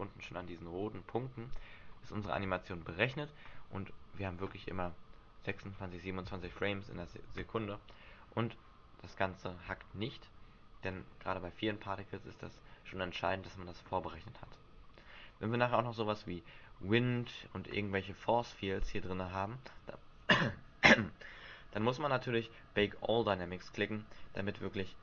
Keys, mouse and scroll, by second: 2.3 alt+a, 6.9 Escape, 18.1-18.6 scroll down 5, 18.6-19.9 scroll up 4.